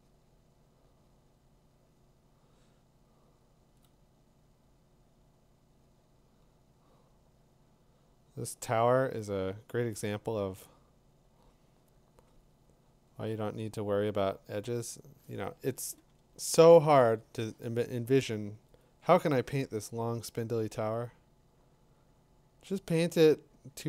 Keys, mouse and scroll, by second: 3.8 click, 13.1 click, 16.0 z, 19.0 click.